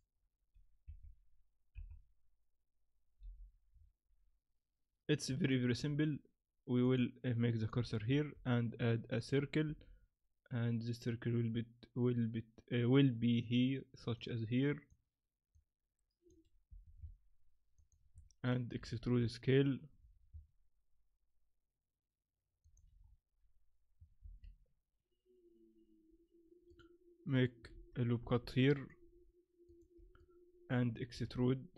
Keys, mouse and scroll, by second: 0.0 click, 0.9 KP_7, 1.8 KP_5, 3.2 n, 3.7-4.9 scroll up 5, 5.5 shift+middle click, 6.8 click, 8.1 shift+a, 9.6 s, 14.2 click, 15.5 click, 16.7 s, 18.1 Tab, 18.8 e, 23.0-24.0 scroll up 3, 24.2 ctrl+r, 27.7 ctrl+z, 28.2 ctrl+r, 30.2 middle click, 31.1 a, 31.3 a.